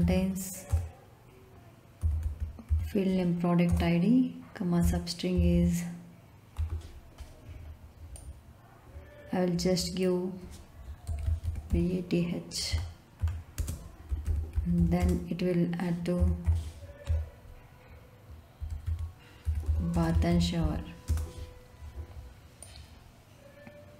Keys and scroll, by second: 0.0-0.5 typing, 0.6 Return, 1.7-3.1 typing, 3.6 Return, 5.3 ', 6.5 Left, 10.8-12.1 typing, 12.6 Right, 13.5-16.1 typing, 17.0 Left, 18.5-21.1 typing.